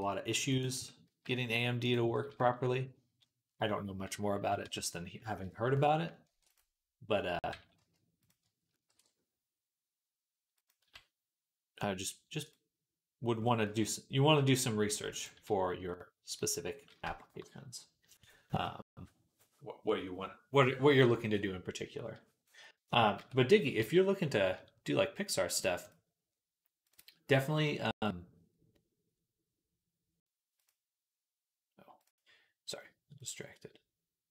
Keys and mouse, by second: 0.6 Tab, 0.9 z, 1.7 click, 1.7-4.5 middle drag, 4.2 KP_3, 4.5 Tab, 6.1 ctrl+r, 7.4 g, 8.3-12.3 ctrl+middle drag, 8.7 ctrl+b, 10.7 z, 12.3-26.8 drag, 23.0 Tab, 23.6 z, 26.8 middle click, 27.7-30.5 drag, 30.5-31.9 middle drag, 31.9-34.3 drag.